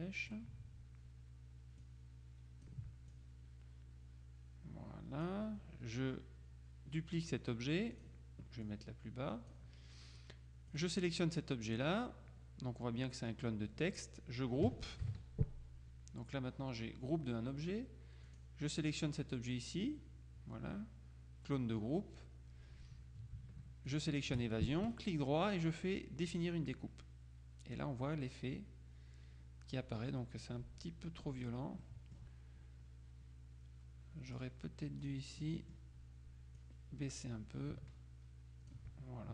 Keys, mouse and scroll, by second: 1.9-3.3 drag, 8.1 click, 10.8 click, 15.1 ctrl+g, 18.3 click, 23.9 shift+click, 24.9 right click, 26.4 click, 31.9 middle click, 34.4 click, 35.1 click, 36.7-39.3 drag.